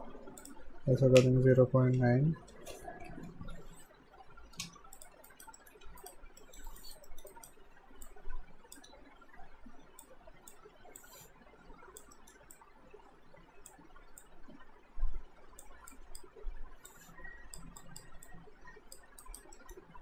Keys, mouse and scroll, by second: 4.3 alt+Num_Lock, 4.6 space, 5.0 click, 5.3 alt+right click, 5.6 alt+middle click, 5.9 q, 6.0 right click, 6.4 alt+middle click, 6.8 alt+right click, 7.1 middle click, 7.3 right click, 8.1 click, 8.9 w, 10.0 click, 12.1 alt+middle click, 12.6 click, 19.2 alt+right click, 19.6 alt+middle click.